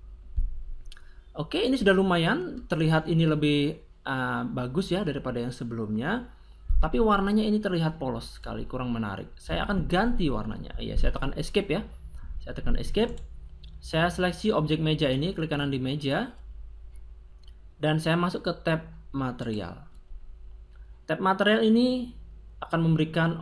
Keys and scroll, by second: 9.3 Escape.